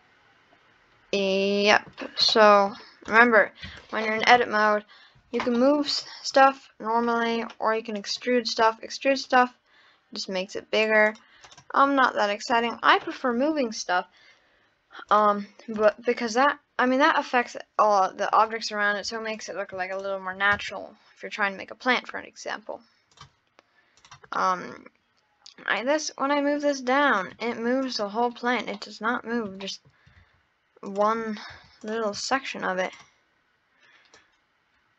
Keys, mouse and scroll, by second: 3.1 click, 3.7 Tab, 4.7 click, 5.6-8.0 middle drag, 8.0 click, 8.6-9.2 scroll down 1, 9.2 click, 11.5 click, 11.9 scroll up 1, 12.1 middle click, 12.6-12.9 scroll up 2, 15.1 click, 15.8 click, 16.5-19.1 middle drag, 19.1 Tab, 19.4 click, 19.9 shift+click, 20.6 Tab, 23.2 click, 24.0 click, 24.4-25.8 middle drag, 25.8 click, 27.3 Tab, 27.8 click, 28.3-28.7 scroll down 3, 28.7-29.3 middle drag, 29.6-30.2 shift+middle drag, 30.2 Tab, 30.9 click, 31.5 Tab, 31.8 click, 32.9 click, 34.2 click.